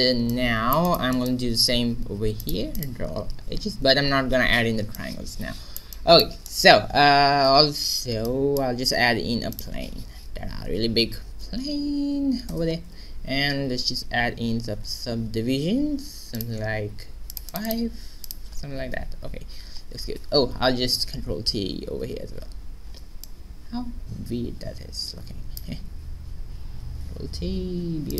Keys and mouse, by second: 1.1 right click, 2.3-4.4 drag, 3.7 a, 4.5-5.7 middle drag, 8.8 shift+a, 9.7 s, 13.3 Tab, 14.5 q, 15.3 w, 17.2-20.0 drag, 19.2 a, 19.5 Tab, 20.3 Tab, 20.8 a, 21.9 ctrl+t, 25.8 ctrl+z, 26.8 ctrl+t, 28.0-28.1 drag.